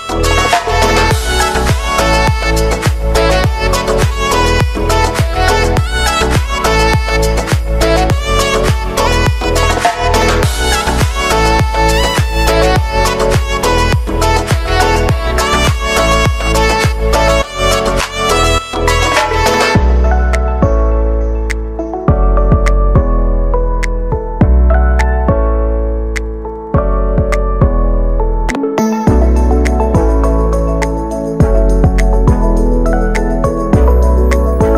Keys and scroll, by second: 4.1 ctrl+z, 4.4 ctrl+z, 5.6 ctrl+alt+z, 14.1 space.